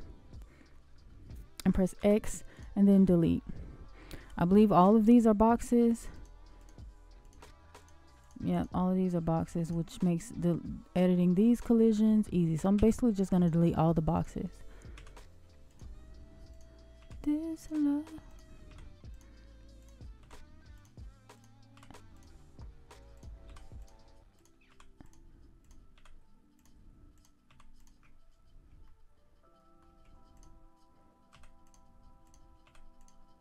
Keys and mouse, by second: 0.7-1.6 shift+middle drag, 1.9 x, 4.2-5.0 shift+middle drag, 6.5 click, 7.2 click, 8.1 click, 9.0 shift+middle drag, 9.6 click, 10.2-11.2 shift+middle drag, 12.7 x, 14.9 x, 16.4 click, 16.9 x, 18.2 click, 18.6 x, 19.7 click, 20.1 x, 21.7 x, 23.4 x, 24.6 x, 25.9 x, 27.1 click, 27.4 x, 28.8-29.7 shift+middle drag, 30.3 click, 31.3 x, 32.6 x.